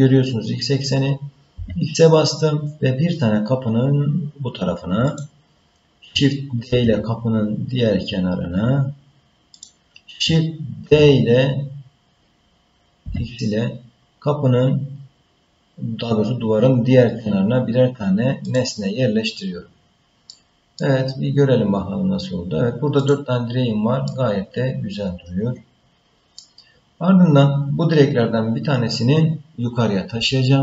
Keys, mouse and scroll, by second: 6.7 shift+d, 10.9 shift+d, 19.7-20.3 scroll down 3, 20.3 middle click, 21.0-21.6 scroll down 4, 21.6 scroll up 4, 22.1-22.8 scroll down 1, 23.0 click, 24.1-26.4 middle drag.